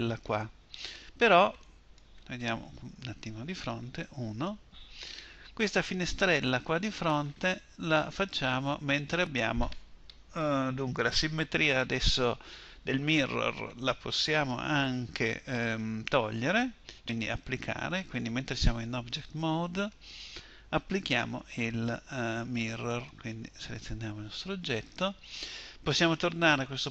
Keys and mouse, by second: 3.4 KP_1, 7.3-23.1 middle drag, 23.3-25.0 drag.